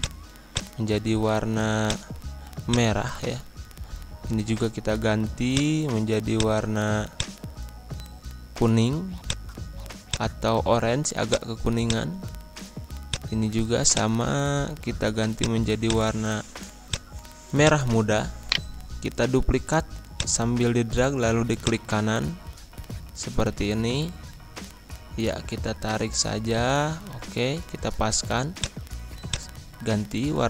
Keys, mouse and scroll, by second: 5.5 click, 18.4 shift+right click, 20.1 click, 20.6 scroll up 1, 21.6-23.3 drag, 23.3 scroll up 1, 24.2 Up, 25.3 Down, 26.9 Up, 28.5 click, 29.3 click, 29.6 scroll down 1.